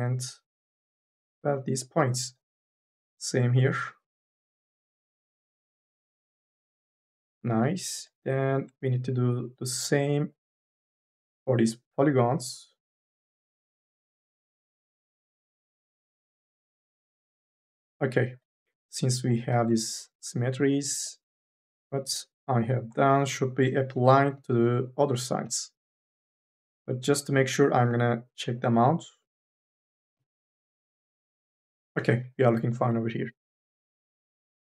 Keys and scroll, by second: 19.3 4, 19.6 e, 22.7 4.